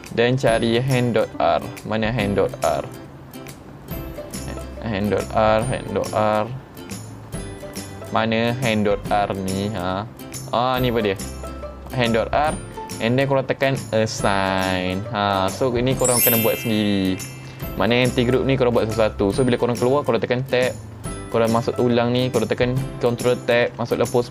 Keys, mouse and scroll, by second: 0.7-2.4 scroll up 15, 2.3 middle click, 2.4-3.9 scroll down 5, 2.6-3.9 middle drag, 4.0 middle click, 4.0-4.6 scroll down 3, 5.1 middle click, 5.1-6.4 scroll down 3, 6.4-6.9 scroll down 3, 6.9-8.1 scroll up 3, 8.2-9.4 scroll up 2, 9.4-9.8 scroll up 3, 10.7 click, 14.5 click, 20.5 Tab, 20.9 middle click, 20.9 scroll down 3, 21.5 click, 23.6 ctrl+Tab.